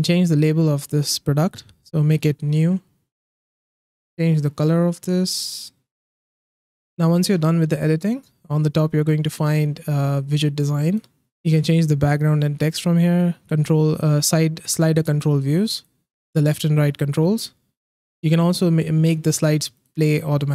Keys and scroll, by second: 2.1-3.1 typing.